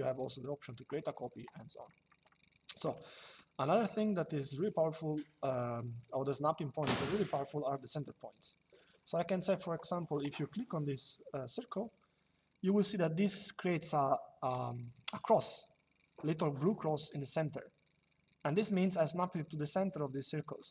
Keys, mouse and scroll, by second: 1.6 middle click, 7.0 click, 20.3 click.